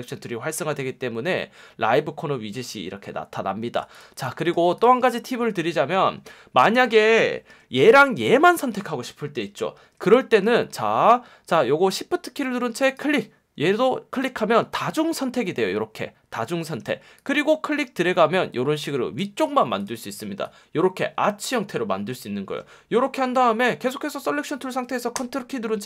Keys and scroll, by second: 4.2 space, 7.5 F1, 9.8 F1.